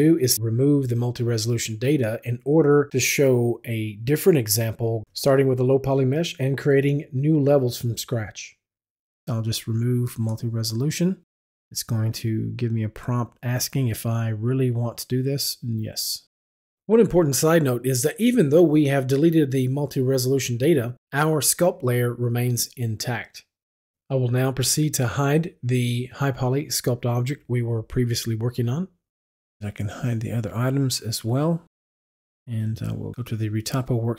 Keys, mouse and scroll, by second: 0.5 click, 1.6 click, 10.3 click, 16.1 click, 20.5 click, 23.9 click, 26.9 click, 29.8 click, 32.2 F11, 32.4 F8.